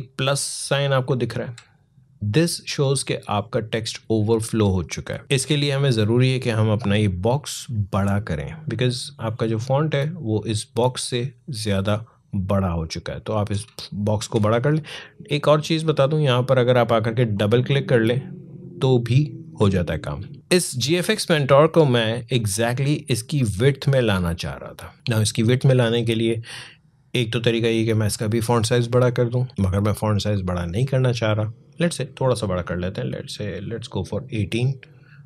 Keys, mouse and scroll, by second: 5.2-7.0 scroll down 1, 9.3-14.0 drag, 14.0 ctrl+z, 17.1 click, 20.3-23.8 drag, 32.4-35.2 drag.